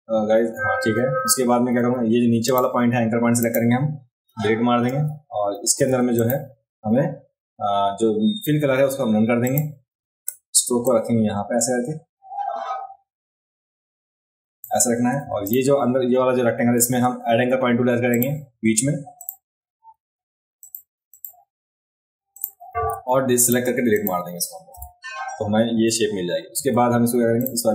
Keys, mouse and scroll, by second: 1.8 a, 2.5 click, 3.4 click, 5.8 v, 6.1 click, 9.4 click, 10.2 v, 10.8-14.6 drag, 15.2 v, 15.4 click, 16.8 a, 18.1 click, 19.2 click, 20.6 click, 21.1 click, 22.3 click, 22.9 a, 23.4 click, 23.9 click, 26.6 v, 27.4 click.